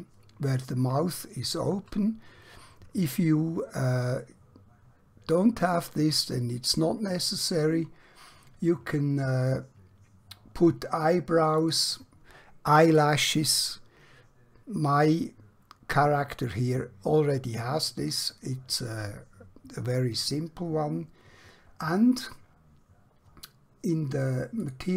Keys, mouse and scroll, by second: 0.9-1.5 scroll up 1, 1.5-2.3 scroll down 1, 2.3-3.5 scroll up 1, 4.4-5.3 scroll down 1, 6.5-7.8 scroll up 1, 11.6 click, 24.7 click.